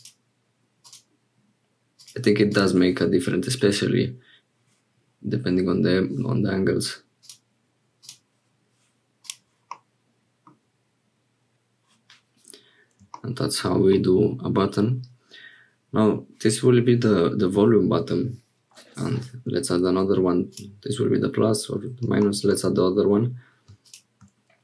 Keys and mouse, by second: 9.2-10.5 drag, 13.9 middle click, 20.5-22.0 drag.